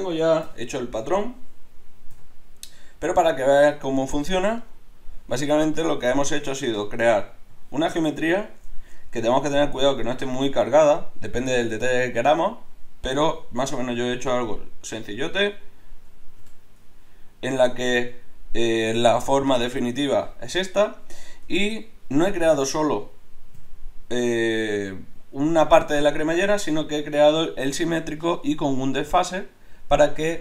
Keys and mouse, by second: 0.5 KP_7, 2.1 KP_5, 4.6 click, 6.4 Tab, 16.5 KP_7, 17.9 Tab, 21.5 Tab, 22.6-24.7 right drag, 23.5 l.